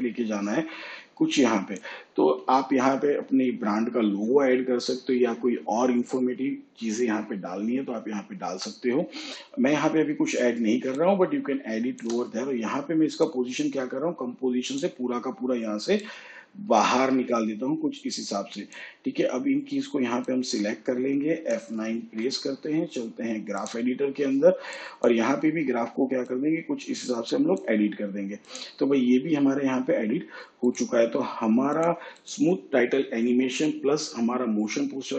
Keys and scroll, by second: 22.0 F9.